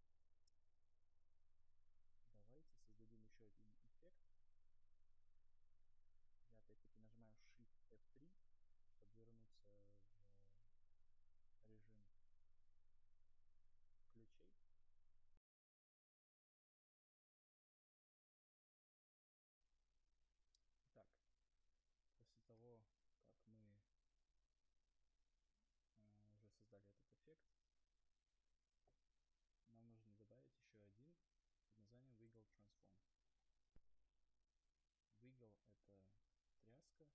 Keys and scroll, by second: 8.6 shift+F3, 25.9 Delete.